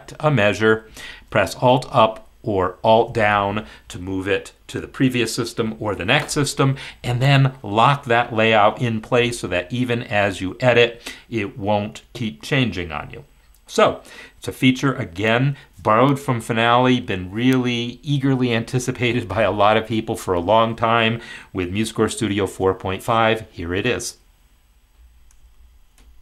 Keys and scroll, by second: 2.8 alt+Down.